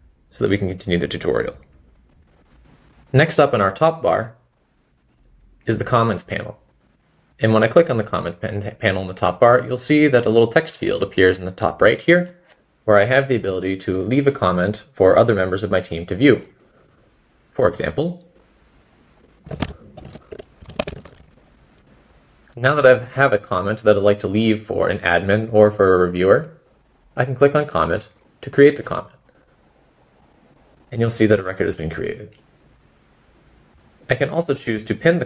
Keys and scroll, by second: 0.8 typing, 30.9 typing, 32.5-34.3 typing.